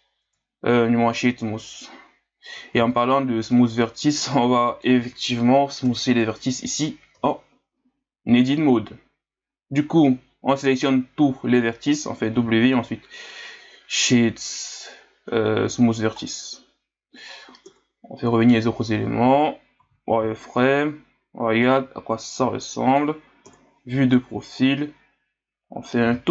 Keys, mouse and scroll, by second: 0.2 Tab, 2.5 a, 2.8 a, 3.5-5.8 middle drag, 5.8 KP_Divide, 7.1 w, 12.3 w, 17.6 KP_Divide, 18.5 KP_1, 19.8 z, 20.4-21.8 scroll up 2, 21.8 s, 23.5 KP_3, 26.1 s.